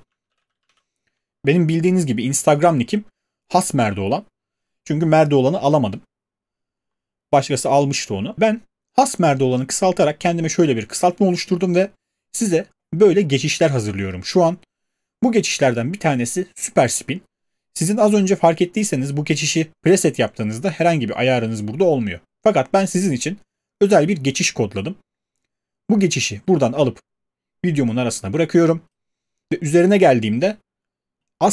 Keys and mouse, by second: 0.0-1.2 typing.